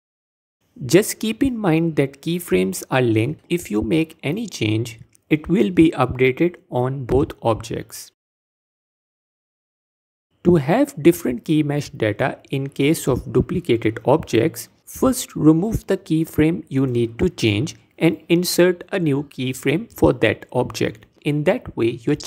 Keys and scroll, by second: 8.2 x, 13.0 x, 20.2 Tab.